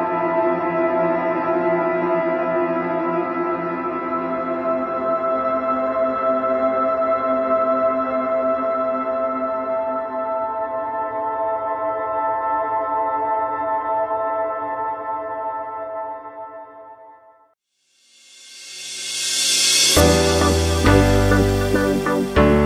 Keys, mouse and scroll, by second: 0.1 click, 0.6 i, 3.4 g, 5.4 s, 7.8 g, 9.6-10.6 middle drag, 10.6 e, 15.0 scroll down 1, 15.2-17.3 middle drag, 17.8-18.8 drag, 18.8-20.7 middle drag, 20.7 click, 22.0 click.